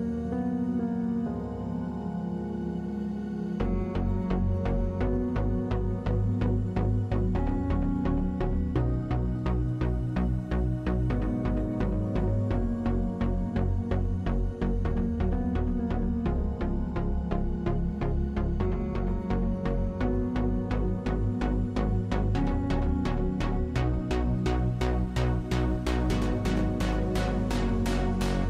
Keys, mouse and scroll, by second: 0.6 f, 4.7-7.3 drag, 7.3 ctrl+z, 7.5 click, 7.8 middle click, 8.2 f, 9.3 click, 10.2 ctrl+z, 10.3 ctrl+z, 11.5 middle click, 11.8 click, 11.8 right click, 13.2 f, 15.9 click, 16.1-20.7 drag, 20.7-22.1 middle drag, 22.1-24.2 drag, 24.2 middle click, 24.5-25.2 scroll up 2, 24.9 middle click, 25.2 middle click, 25.6 click, 26.0-28.4 drag.